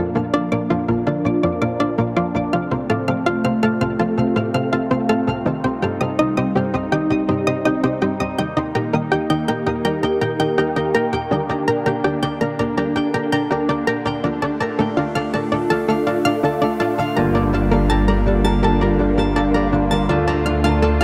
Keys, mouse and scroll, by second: 0.8 shift+click, 7.1 click, 7.6 shift+Down, 9.5 click, 9.8 shift+Down, 11.3 click, 11.8 shift+Up, 12.9 click, 13.3 shift+Up, 15.8 click, 16.0 shift+Up, 17.8 Down, 20.5 click.